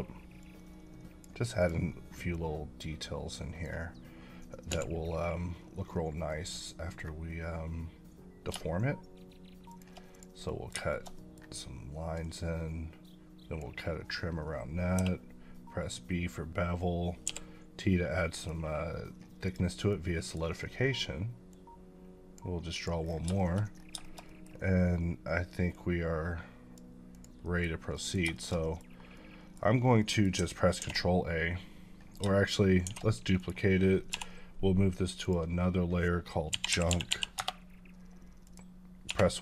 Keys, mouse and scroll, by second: 0.4 click, 2.6 click, 4.7 v, 5.9 scroll up 1, 8.5 scroll up 6, 9.7 shift+click, 10.5 middle click, 10.9 shift+middle click, 12.2 click, 14.9 b, 17.2 t, 18.4 click, 19.9 middle click, 20.4 scroll up 2, 21.5 click, 23.0 scroll down 3, 23.4 shift+middle click, 23.6 scroll up 1, 24.0 shift+middle click, 24.4 scroll up 1, 25.7 click, 27.4 middle click, 27.8 scroll down 1, 27.9 middle click, 28.4 shift+middle click, 28.9 scroll down 1, 29.1 middle click, 30.0 middle click, 30.8 ctrl+a, 32.8 shift+d, 33.4 right click, 34.1 m, 35.2 click, 36.7-37.1 typing, 38.5 click, 39.1 1.